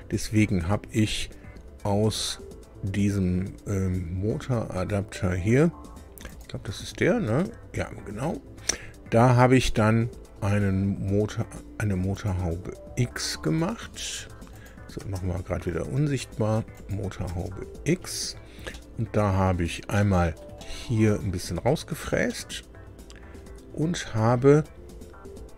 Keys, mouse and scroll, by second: 0.6 scroll up 2, 1.4-2.5 scroll down 6, 4.3-4.7 scroll down 2, 6.2 click, 6.7 space, 7.3 space, 12.1 click, 14.5 click, 15.0 space, 16.7 click, 17.3 space, 18.7 middle click, 19.9-21.2 shift+middle drag, 22.3-24.8 drag.